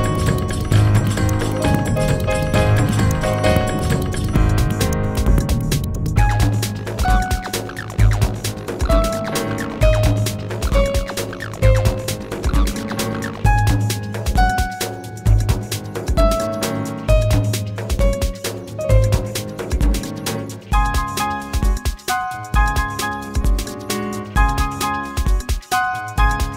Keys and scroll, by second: 11.4 w.